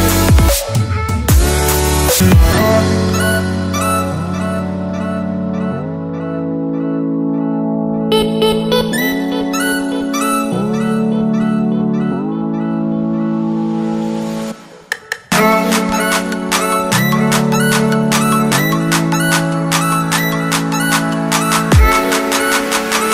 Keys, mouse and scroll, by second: 0.7-1.3 alt+scroll up 2, 1.5 click, 2.8 KP_Add, 4.7 click, 5.3 Right, 6.1 KP_Add, 8.2 click, 10.5 Tab, 11.0 click, 11.5-13.4 typing, 11.8 Tab, 14.0 click, 14.7 click, 15.1 c, 15.3 Tab, 16.3 click, 17.1 click, 19.4 t, 19.6 click, 20.6 Return, 21.2 alt+Tab, 21.5 click, 22.1 ctrl+c, 22.3 alt+Tab, 22.7 click.